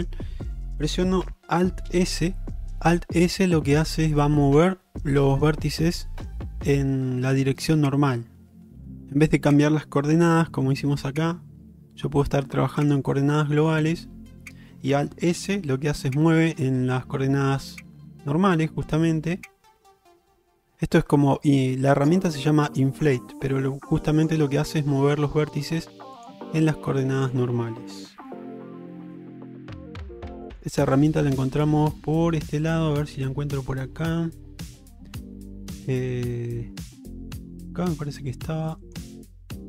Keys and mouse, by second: 16.0 alt+s, 24.8 middle click, 26.2 click, 37.3 click.